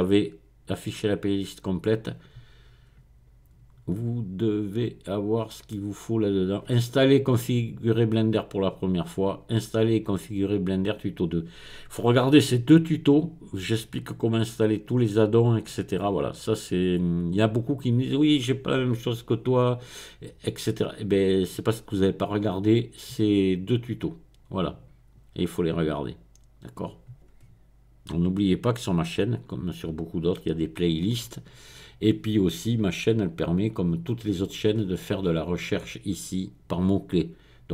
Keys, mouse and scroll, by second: 1.0 click, 5.3-6.1 scroll down 1, 6.1-7.0 scroll down 1, 28.9 click, 29.6 click, 29.8 click, 33.6 click, 34.7-35.9 scroll up 3, 35.9 click.